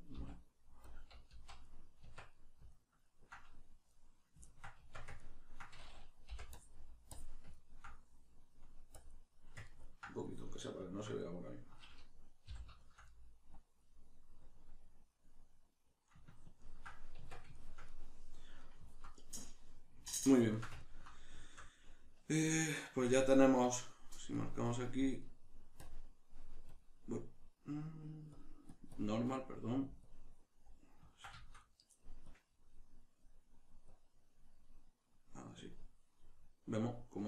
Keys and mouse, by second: 0.9 click, 1.3 z, 1.7-6.5 middle drag, 2.0 Tab, 4.8 Tab, 6.3 |, 6.5-7.6 drag, 7.6-8.9 ctrl+middle drag, 8.9 click, 9.7 ctrl+middle click, 10.3 click, 10.9-13.5 ctrl+middle drag, 12.5 g, 13.5-15.1 drag, 15.1-24.4 middle drag, 17.2 Tab, 24.4 click, 29.2 middle click, 30.0 click, 30.6-32.2 middle drag, 32.2-35.6 drag, 35.6-37.2 middle drag.